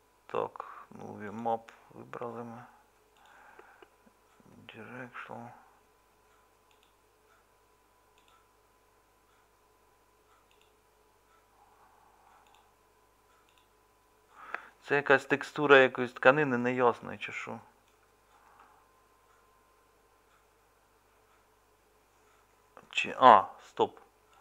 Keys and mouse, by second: 17.9-24.4 middle drag.